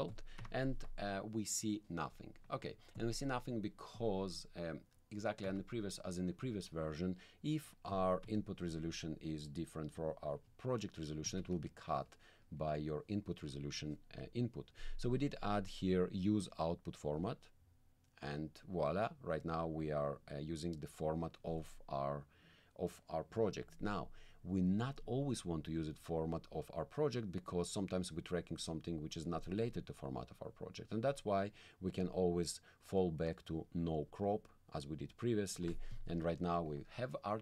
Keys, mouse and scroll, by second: 0.1 click, 0.4 1, 2.5 click, 3.0 click, 3.9 click, 5.4 1, 7.9 click, 8.2 1, 11.2 click, 11.4 1, 17.1 click, 31.1 click, 32.0-34.2 drag, 36.1 middle click.